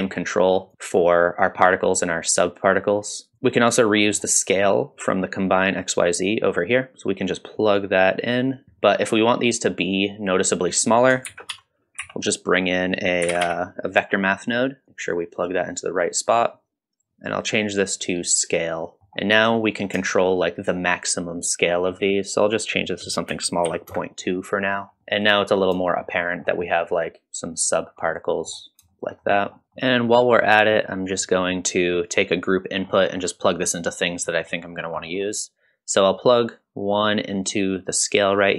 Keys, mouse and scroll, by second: 0.6-3.3 shift+drag, 3.3 shift+middle click, 3.3-3.8 scroll down 1, 3.8-4.2 scroll up 2, 4.1 middle click, 7.6-8.6 drag, 11.3 shift+a, 15.7-17.0 drag, 17.4-19.0 drag, 19.0 middle click, 19.0 scroll up 1, 20.1-21.7 shift+drag, 22.4-24.4 drag, 24.8-25.3 scroll up 3, 25.3 middle drag, 25.8 shift+middle drag, 26.3 scroll down 1, 26.6 middle drag, 27.8-28.1 scroll up 1, 28.1-28.5 middle drag, 28.9 shift+middle click, 29.3 middle click, 29.6 ctrl+s, 29.6 middle click, 29.6 scroll down 1, 30.2 middle click, 30.7 middle click, 31.2 middle click, 31.8-32.5 drag, 32.8 scroll up 2, 33.0 middle click, 34.3 middle click, 34.8 scroll down 1, 35.0 middle click, 37.1-38.4 drag.